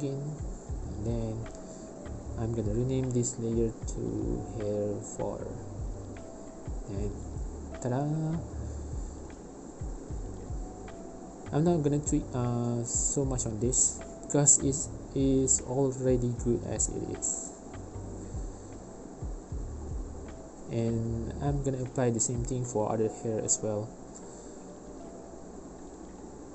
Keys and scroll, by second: 5.1 4, 15.0 space, 19.1 space.